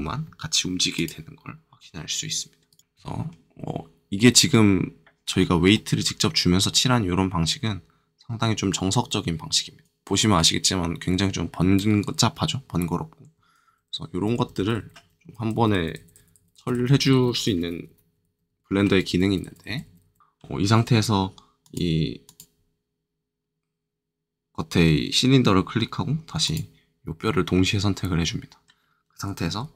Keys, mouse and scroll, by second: 0.9 click, 1.7 r, 2.7 right click, 5.7 middle click, 9.8-13.3 drag, 13.6 ctrl+z, 14.2 ctrl+z, 20.2 click, 20.2 middle click, 21.6 click, 22.2 click, 26.4 shift+click, 27.2 middle click.